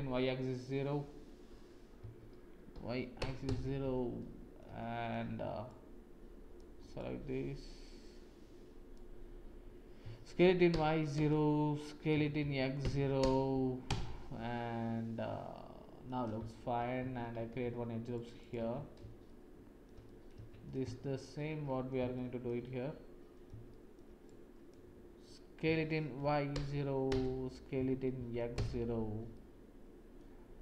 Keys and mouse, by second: 0.4 middle click, 1.9 s, 4.1 shift+middle click, 4.4 shift+click, 4.7 middle click, 5.6 click, 6.9-8.9 drag, 10.0 s, 12.1 s, 14.5 Tab, 15.5-16.0 middle drag, 17.0 Tab, 17.5 ctrl+r, 18.7 Tab, 19.2 shift+click, 20.0 click, 20.3 Tab, 21.1 shift+click, 22.1 shift+click, 22.6 click, 23.7 shift+click, 24.2 click, 25.6 s, 27.7 s, 29.3 click.